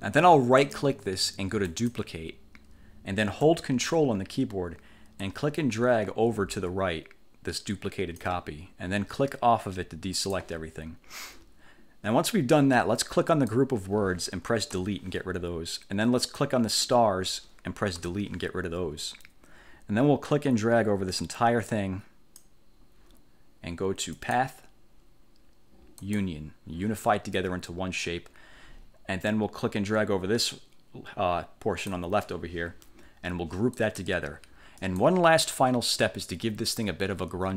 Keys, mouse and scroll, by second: 0.7 click, 1.8 click, 5.3-8.5 ctrl+drag, 10.3 click, 13.4 click, 14.8 Delete, 16.3 click, 18.1 Delete, 20.3-22.7 drag, 24.3 click, 26.1 click, 29.4-32.2 drag, 33.9 click, 34.9 click.